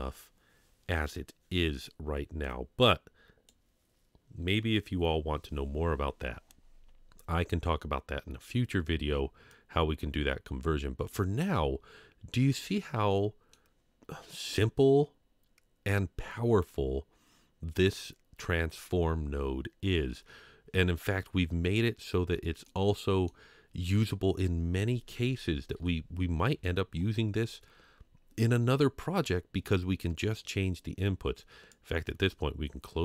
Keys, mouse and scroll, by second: 2.4-3.6 drag, 9.5-11.2 drag, 12.6-13.8 scroll down 1, 13.8 scroll down 1, 13.9 middle click, 22.6-23.3 middle drag, 25.7 Home, 30.5 scroll up 2, 31.7-33.0 drag.